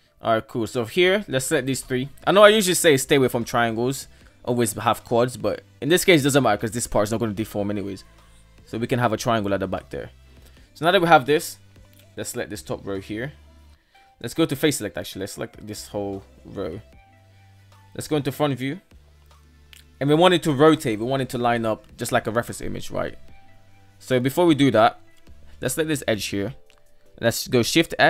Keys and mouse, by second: 0.0 right click, 0.4 shift+right click, 1.0 shift+right click, 3.6 f, 8.3 shift+middle drag, 8.8 shift+middle click, 12.4 ctrl+right click, 14.0 KP_3, 14.5 right drag, 15.0 shift+right drag, 15.4 shift+right drag, 15.8 shift+right click, 16.2 shift+right click, 17.0 Tab, 17.1 KP_1, 18.0 Tab, 19.0 shift+middle drag, 22.9-23.3 middle drag, 23.6-24.0 shift+middle drag, 24.4 KP_1, 24.8 right click, 25.1 alt+z, 27.2 shift+s.